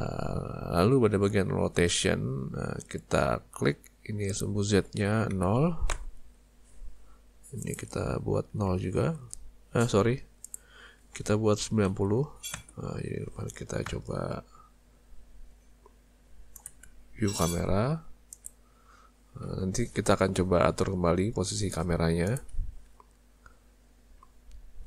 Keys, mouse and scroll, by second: 4.3 click, 7.6 click, 17.8 z, 24.4 z.